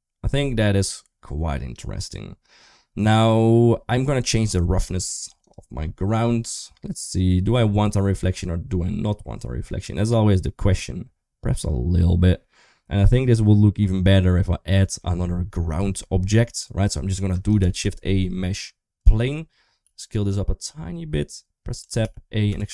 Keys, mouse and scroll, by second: 4.1 click, 6.4-14.8 drag, 17.4 shift+a, 19.6 s, 21.6 Tab, 21.8 a, 22.3 e.